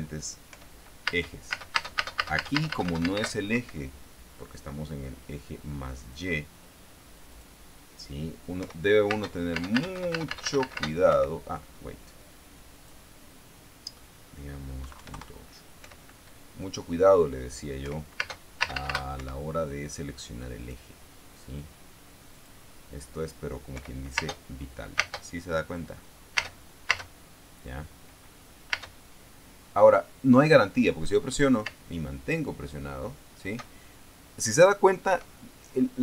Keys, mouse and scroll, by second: 1.0 p, 1.6 space, 4.0 Escape, 6.6 click, 7.8 click, 9.1 p, 9.6 space, 11.7 Escape, 13.3 click, 15.3 KP_Decimal, 15.5 KP_8, 15.6 KP_Enter, 16.3 p, 18.3 p, 18.7 space, 19.7 Escape, 21.1 click, 22.9 click, 24.3 p, 24.7 space, 25.5 space, 26.9 space, 29.3 space, 32.2 space, 35.6 Escape.